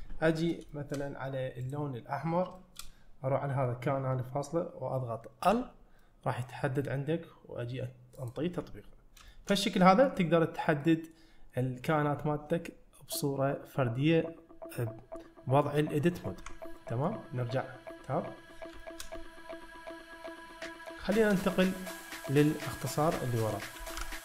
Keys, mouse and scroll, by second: 1.0 shift+middle click, 1.7 click, 2.6 shift+middle click, 5.5 l, 6.0 middle click, 8.2 click, 9.0 scroll down 1, 9.3 shift+middle click, 9.8 middle click, 10.8 middle click, 16.4 Tab, 16.8 middle click, 18.8 shift+middle drag, 19.2-20.9 middle drag, 21.1 shift+middle drag.